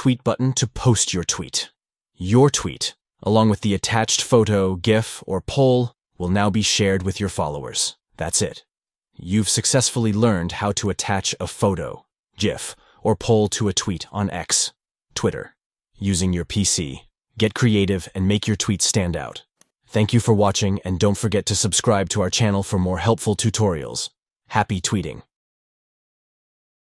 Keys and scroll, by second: 0.2 shift+3.